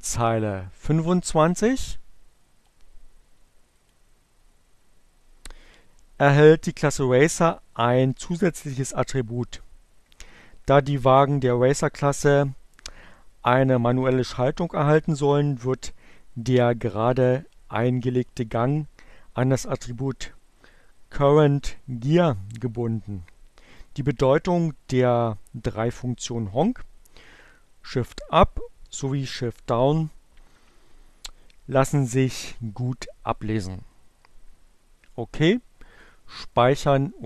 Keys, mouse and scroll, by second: 3.1 click, 34.7 click.